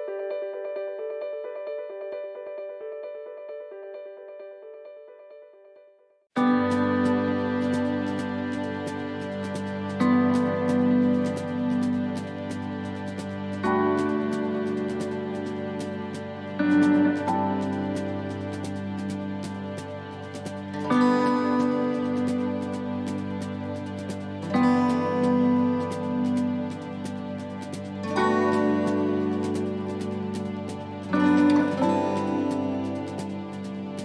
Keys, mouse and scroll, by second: 0.1 right click, 0.5 middle click, 1.5 shift+right click, 1.8 shift+middle click, 2.9 middle click, 3.7 shift+right click, 4.0 middle click, 5.6 right click, 6.1 middle click, 6.9 shift+right click, 7.2 middle click, 8.3 s, 10.4 shift+middle click, 12.0 right click, 12.4 middle click, 13.2 shift+right click, 13.6 middle click, 14.2 s, 15.9 middle click, 16.2-16.6 scroll down 6, 16.8 middle click, 17.3 shift+middle click, 17.8 scroll down 1, 18.0 scroll up 1, 18.1 middle click, 18.6-19.0 scroll up 2, 19.0 middle click, 19.3 shift+middle click, 20.0 right click, 21.0 l, 32.4 scroll up 2, 32.9 shift+middle click, 33.9 click.